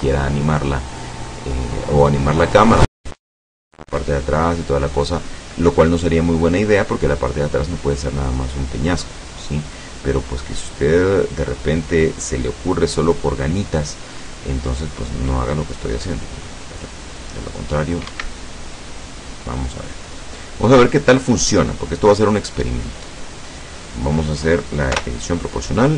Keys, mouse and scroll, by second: 17.9 scroll down 1, 18.2 Escape, 18.5-21.2 drag, 21.2-21.6 scroll up 1, 22.0 scroll down 1, 25.0 o.